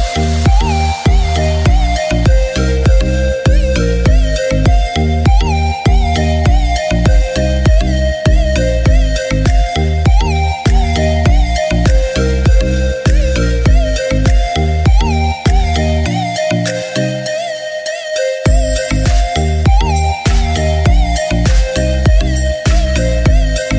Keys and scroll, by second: 10.3-14.9 typing, 16.0 typing.